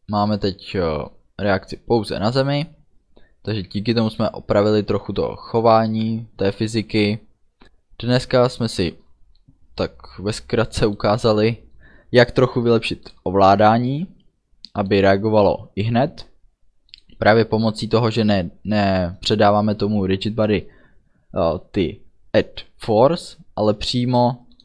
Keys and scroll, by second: 0.3 d, 3.8 a, 4.6 d, 7.4 a.